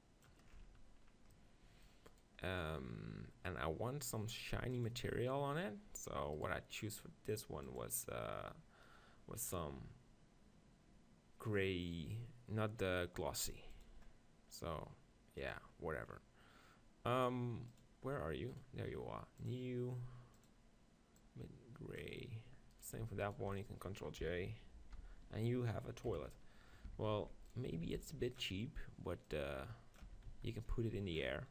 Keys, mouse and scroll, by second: 0.5-1.6 middle drag, 2.2-4.8 right drag, 3.3-11.6 middle drag, 5.6 click, 6.6-11.6 right drag, 13.8-15.4 drag, 13.8-16.1 middle drag, 16.1-22.3 drag, 18.5-21.2 right drag, 18.9-21.2 middle drag, 22.8-25.0 right drag, 24.8 ctrl+j, 26.1 KP_1, 26.9 Tab, 27.2 z, 27.5-29.3 right drag, 27.9 b, 29.3 click, 30.1 Tab.